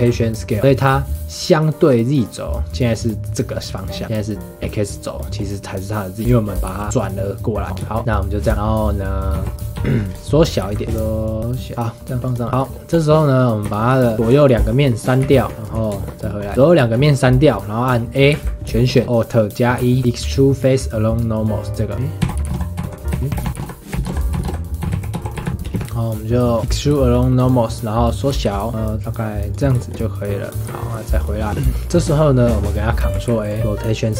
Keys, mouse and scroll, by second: 2.9-6.6 middle drag, 6.6 r, 7.7 scroll down 2, 7.8-9.3 shift+middle drag, 9.3 KP_1, 9.7 KP_3, 9.8 shift+middle drag, 10.1 scroll up 1, 10.6 s, 11.7 g, 12.2 click, 12.4 shift+middle click, 12.9 click, 13.2-13.6 middle drag, 13.6 Tab, 14.1 middle click, 14.4 shift+click, 14.7 middle click, 15.2 x, 15.4 Tab, 15.9-16.4 shift+middle drag, 16.4 scroll up 3, 16.5 Tab, 16.8-18.3 shift+middle drag, 18.3 a, 18.8-19.8 shift+middle drag, 19.8 alt+e, 22.3-24.3 typing, 23.2 middle click, 25.8 s, 26.6-28.3 middle drag, 28.3 s, 29.8 shift+middle click, 30.7 Tab, 31.1 click, 31.4-33.2 shift+middle drag, 33.2 ctrl+a.